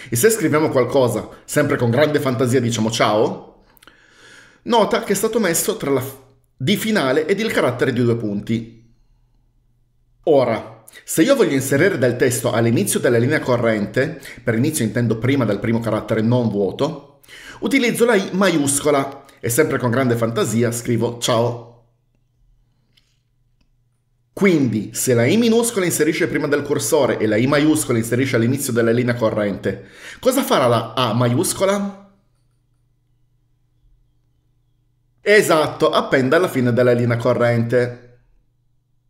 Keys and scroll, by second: 3.0-4.1 typing, 5.8 Escape, 18.6 typing, 21.2-22.3 typing, 35.5-36.9 typing, 37.0 Escape.